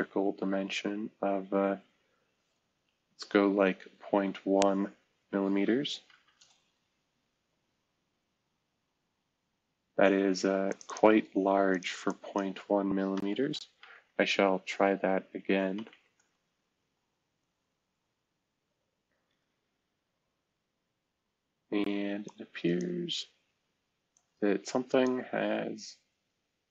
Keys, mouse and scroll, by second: 3.8 typing, 4.9 Delete, 5.1 Delete, 6.0 m, 6.3 Return, 7.8-9.1 scroll down 1, 8.2-9.4 typing, 13.3-13.9 typing, 15.4 Caps_Lock, 15.4-16.9 typing, 17.5-18.6 scroll up 2, 18.6-19.2 scroll down 2, 19.2-20.1 scroll up 2, 20.6-21.0 scroll up 2, 25.3-25.9 scroll down 1, 25.9-26.7 scroll up 1.